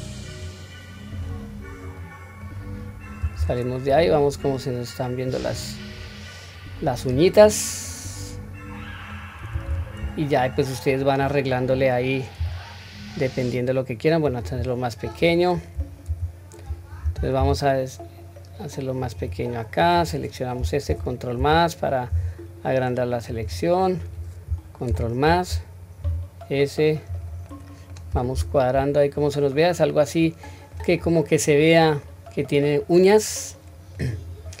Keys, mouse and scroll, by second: 0.4 click, 1.6-2.0 scroll down 1, 2.0-2.4 middle drag, 2.6 scroll down 1, 3.4 Tab, 4.0-7.0 middle drag, 7.4-7.8 scroll up 1, 7.8-9.1 middle drag, 9.6 Tab, 10.1 scroll down 1, 10.9 middle click, 11.5-12.4 scroll up 1, 12.4 s, 15.0 click, 16.1 ctrl+KP_Add, 17.4 s, 19.8 click, 20.9 ctrl+KP_Add, 22.1 s, 24.0 click, 24.9 ctrl+KP_Add, 26.0 s, 27.5-28.0 middle drag, 28.3 Tab, 28.9-29.3 scroll down 1, 29.3-30.7 middle drag, 31.0-31.4 scroll up 1, 31.4-31.9 scroll down 1, 31.9 scroll down 1, 32.0-34.0 middle drag, 34.2-34.6 scroll down 1.